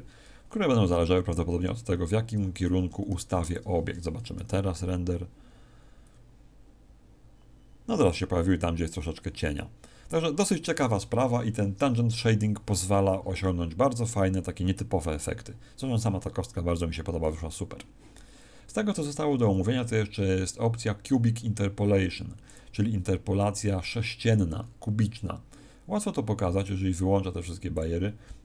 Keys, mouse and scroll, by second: 2.3 Escape, 3.0 r, 3.5 click, 17.1 Escape, 18.2-18.7 scroll down 3, 19.1 scroll down 3, 22.4 click, 24.5-26.1 scroll up 1, 26.5 click, 27.7 click, 28.2-28.4 scroll up 2.